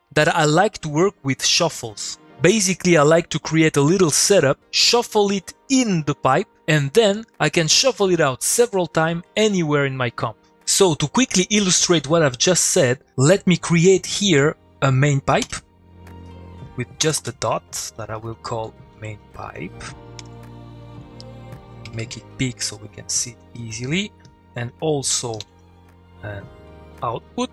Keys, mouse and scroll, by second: 16.0 click, 17.0 space, 18.5 space, 20.1 shift+p, 21.2 click, 23.5 click, 25.3 ctrl+click, 25.4 ctrl+v, 26.2 click.